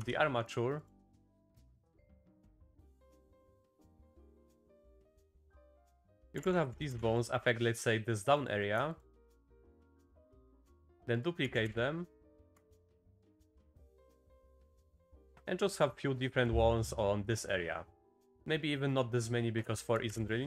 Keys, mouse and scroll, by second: 0.0 Tab, 0.2 click, 0.2 typing, 0.8 click, 1.7 click, 1.8 g, 3.8 click, 4.3 r, 6.9 click, 7.3 click, 8.4 click, 9.4 shift+click, 10.0 shift+click, 10.3 click, 10.6 shift+d, 11.4 s, 12.9 s, 13.7 click, 14.2 click, 15.5 click, 16.2 click, 17.2 click, 18.2 click, 18.9 click, 19.7 shift+click, 20.1 x.